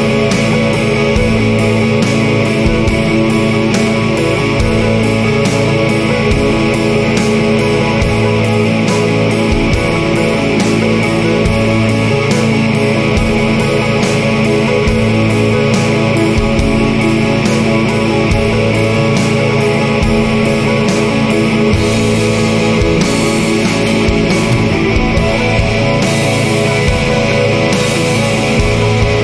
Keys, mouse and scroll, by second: 1.8 click, 3.6 click, 5.0 click, 5.9 click, 7.6 0, 8.5 click, 9.8 2, 11.0 click, 11.5 click, 12.5 click, 13.5 0, 14.3-14.6 scroll up 2, 15.8 click, 16.2 click, 18.0-20.9 drag, 21.5 click, 22.5-24.9 drag, 25.2 click, 26.9 click, 28.2 click.